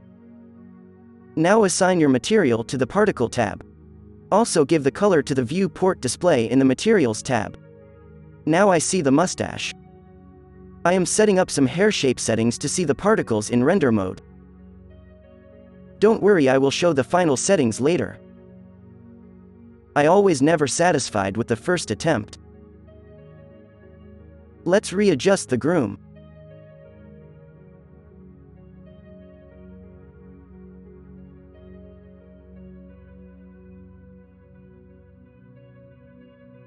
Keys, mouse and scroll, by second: 0.6-3.4 drag, 3.5-8.1 drag, 9.1-15.6 drag, 15.6-16.9 middle drag, 15.9 z, 16.4 alt+a, 17.3 alt+a, 19.0-19.9 drag, 19.6 alt+a, 19.9 z, 24.3 f, 30.5 f, 31.8 f, 33.0 f, 36.4-36.6 drag.